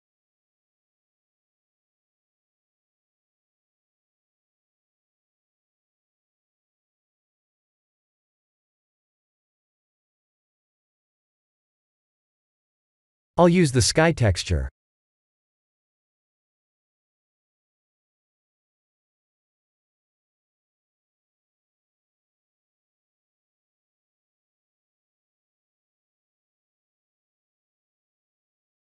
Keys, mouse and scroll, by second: 0.0 click, 6.2 click, 7.2-12.0 drag, 14.4-16.8 drag, 19.1 click, 23.3-25.5 drag, 26.6-28.6 drag.